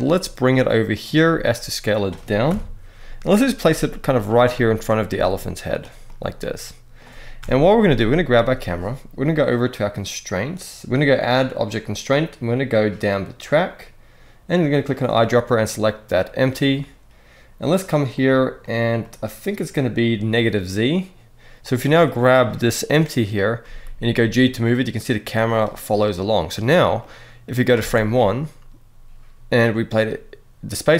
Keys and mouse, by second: 0.6 click, 1.0 s, 1.7 click, 2.2 KP_1, 3.3 g, 4.2-4.8 middle drag, 4.8 g, 5.8-6.7 middle drag, 7.1 KP_0, 8.1 click, 10.1 click, 11.2-12.9 drag, 17.9 click, 18.3 click, 18.7 click, 19.2 click, 21.4 click, 23.3 g, 25.2-26.4 right drag, 26.7-27.4 drag, 27.5 space.